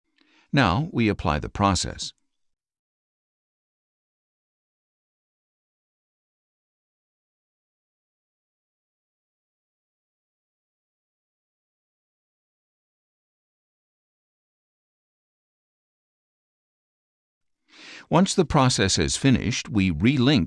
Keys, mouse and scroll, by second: 1.7 click, 15.8-17.3 drag, 20.1 click.